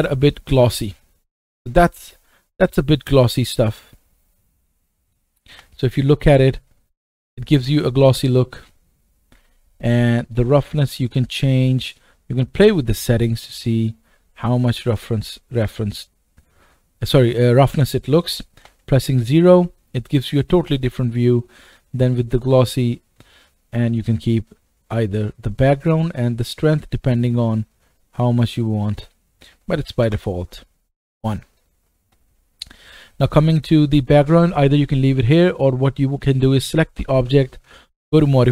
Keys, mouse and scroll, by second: 4.7-7.2 middle drag, 5.5 KP_0, 7.2 KP_0, 10.3 click, 18.6 KP_0, 20.6 KP_0, 20.8-26.1 drag, 27.2-33.4 drag, 32.3-33.3 scroll down 2, 33.3 middle click, 33.4 right click, 36.1 click, 38.2 click.